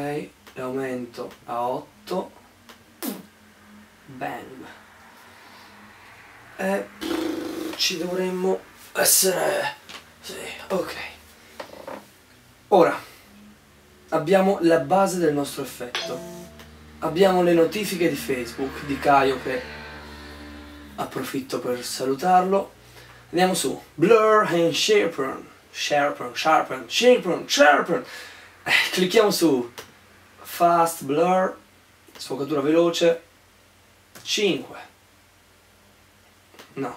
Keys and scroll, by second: 2.2 8, 4.2 8, 34.3 5, 36.2 5.